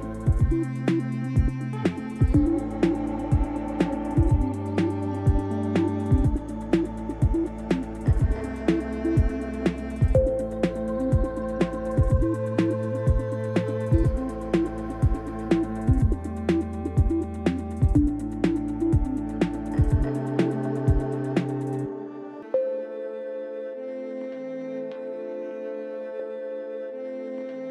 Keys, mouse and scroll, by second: 0.8-3.6 drag, 3.6-5.3 middle drag, 4.1-5.3 scroll down 2, 5.3-8.5 drag, 8.5-10.2 middle drag, 10.2 click, 10.4-13.4 middle drag, 13.4 click, 13.6-15.8 middle drag, 15.8 click, 15.9-17.4 middle drag, 17.4 click, 17.5-27.7 middle drag.